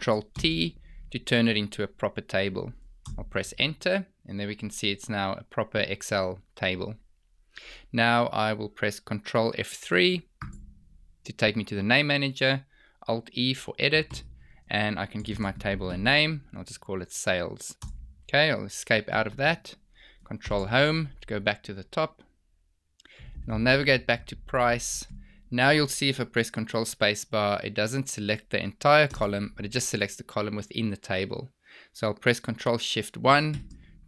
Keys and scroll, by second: 0.2 ctrl+t, 9.2 ctrl+F3, 20.3 ctrl+Home, 29.1 ctrl+space, 33.7 ctrl+shift+1.